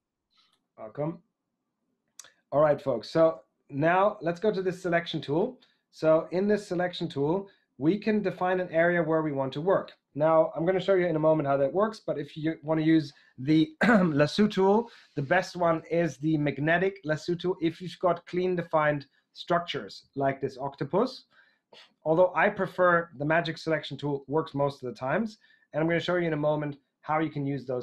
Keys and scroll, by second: 3.4 super+Tab.